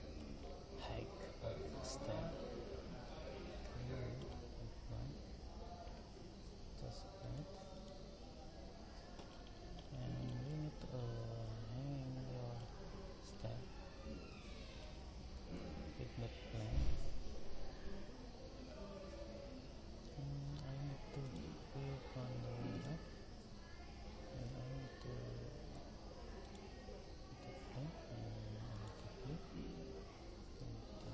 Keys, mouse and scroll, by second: 7.2 click, 9.5-14.4 middle drag, 15.6 shift+a, 21.5 click, 25.2 shift+a, 28.8 click.